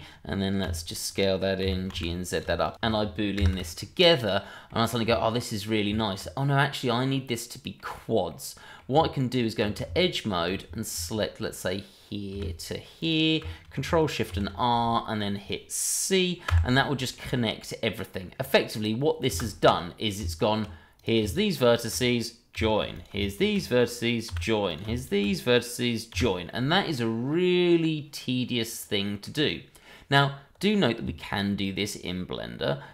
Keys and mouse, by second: 0.6 s, 1.1 click, 1.6 g, 1.9 z, 2.3 click, 2.6 shift+click, 2.7 ctrl+z, 3.4 ctrl+shift+KP_Add, 4.2 click, 4.4 middle drag, 4.8 click, 5.2 shift+middle drag, 5.8 Tab, 6.5 middle click, 7.1-7.7 middle drag, 8.3-8.8 middle drag, 9.0 Tab, 10.0 alt+click, 11.2-12.4 middle drag, 13.0 alt+shift+click, 14.3 ctrl+shift+r, 16.5 c, 17.1-18.2 middle drag, 19.3 space, 20.2 Tab, 20.9 click, 21.2 shift+click, 21.7 shift+middle drag, 22.5 j, 22.9 click, 23.3 shift+click, 24.7 click, 24.9 shift+click, 26.4-29.2 middle drag, 31.0 Tab.